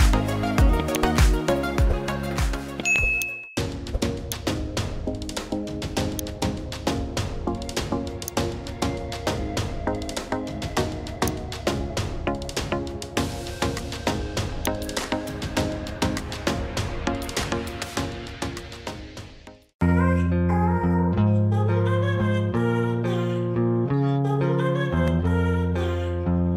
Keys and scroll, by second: 11.0 space, 12.4 ctrl+space.